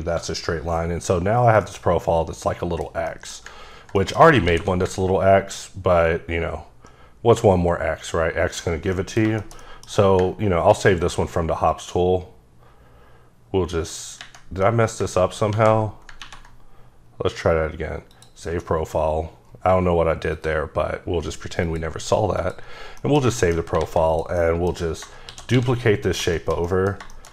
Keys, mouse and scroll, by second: 1.2 scroll down 2, 1.6 middle click, 3.0 middle click, 4.4 alt+w, 5.9 ctrl+click, 8.9 middle click, 10.7 ctrl+right click, 11.7 click, 14.6 middle click, 15.5 ctrl+z, 18.1 click, 19.4-20.3 scroll down 3, 20.3 click, 21.6 click, 22.4 click, 22.7 scroll down 1, 23.2 middle click, 23.4 shift+middle click, 23.8 a, 24.1 click, 24.4 middle click, 25.2 shift+d, 25.5 x, 26.0 click, 26.3 shift+scroll up 1, 26.4 shift+middle click.